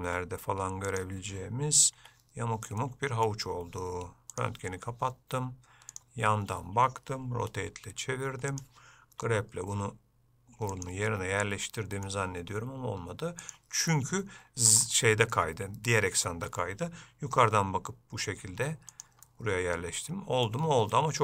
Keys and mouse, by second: 2.1 Tab, 2.9 middle click, 9.4 g, 11.2 middle click, 13.6 click, 15.5 shift+middle click, 19.4-20.6 middle drag, 21.1 middle click.